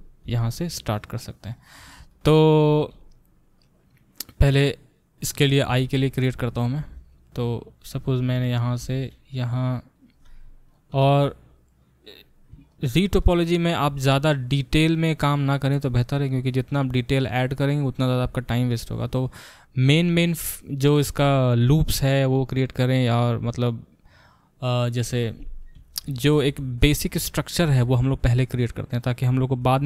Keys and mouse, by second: 0.2 g, 1.6-10.7 ctrl+middle drag, 6.8 g, 8.8 e, 10.7 click, 10.7-29.8 middle drag, 10.9 e.